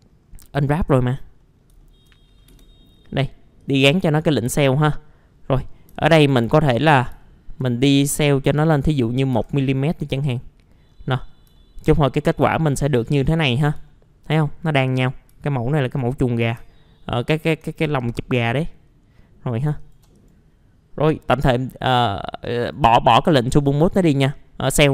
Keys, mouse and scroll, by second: 0.2-0.5 scroll up 1, 0.5 click, 1.2 scroll up 1, 1.4 middle click, 1.8 alt+middle click, 2.2 scroll up 1, 2.5 F4, 3.6 click, 5.7 scroll down 1, 6.0 alt+middle click, 6.5-7.1 scroll up 1, 7.2 alt+middle click, 7.8-8.2 scroll up 1, 8.2 middle click, 8.5 F4, 10.2 click, 10.9-11.5 scroll down 1, 11.5 alt+middle click, 12.0-12.7 scroll up 1, 13.4 middle click, 13.8 alt+middle click, 15.1 scroll down 1, 15.4 alt+middle click, 16.4 scroll down 1, 16.7 alt+middle click, 17.9 scroll down 1, 18.3-18.7 scroll up 1, 18.7 middle click, 19.8 shift+click, 20.2 right click, 22.6 click, 23.2 right click, 24.0 click, 24.8 middle click.